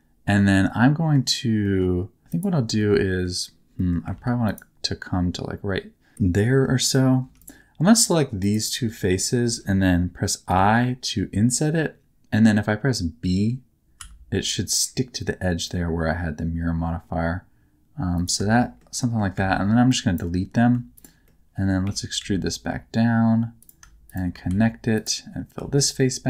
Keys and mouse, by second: 0.5 middle click, 1.6 middle click, 2.2 shift+3, 2.7 middle click, 3.7 middle click, 4.1 ctrl+r, 6.1 middle click, 7.2 3, 7.3 click, 8.4 shift+click, 10.4 i, 13.9 b, 18.6 shift+middle click, 18.9 middle click, 19.3 x, 20.6 x, 21.2 middle click, 21.8 e, 22.1 z, 24.4 f, 25.5 f, 25.9-26.2 middle drag.